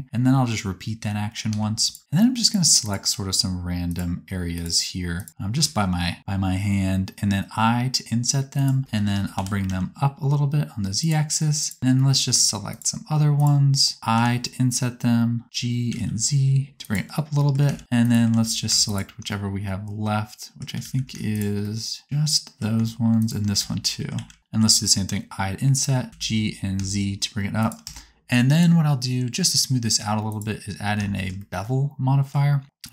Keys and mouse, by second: 1.6 3, 2.4 shift+click, 3.6-6.4 shift+right drag, 6.2 i, 9.4 g, 9.8-11.6 right drag, 11.8 shift+right click, 14.1 i, 15.4 g, 17.7 alt+z, 18.0 click, 18.0 right click, 18.4 alt+z, 20.8 alt+z, 23.2 shift+click, 23.2 shift+right click, 23.6 alt+z, 24.1 alt+z, 24.7 i, 26.1 g, 26.9-28.5 shift+drag, 28.0 Tab, 31.3 middle click.